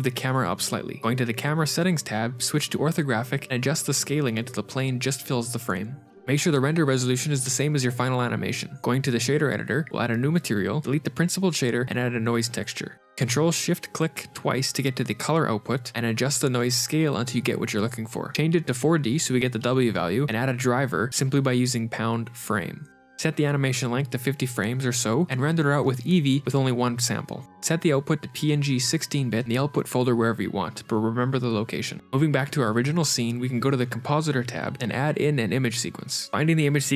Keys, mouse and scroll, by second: 0.1 g, 1.8 click, 4.2 KP_0, 5.3 shift+click, 8.4 click, 8.8 ctrl+shift+r, 9.8 click, 10.8 middle click, 10.8 click, 10.8 scroll up 8, 10.9 x, 11.4 shift+a, 13.6 click, 15.6-16.4 scroll up 5, 16.4 click, 16.4 scroll up 1, 18.2 click, 32.0 click, 33.9 g, 34.0 middle click, 34.7 scroll up 4, 34.9 middle click.